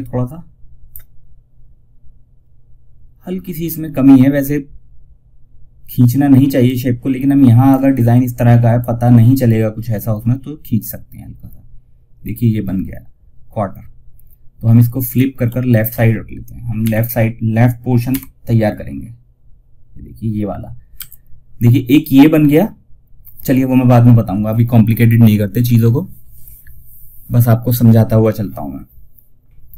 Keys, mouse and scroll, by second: 5.9-8.0 drag, 8.0 scroll up 1, 10.3 scroll down 1, 14.4 click, 16.1 ;, 17.4 l.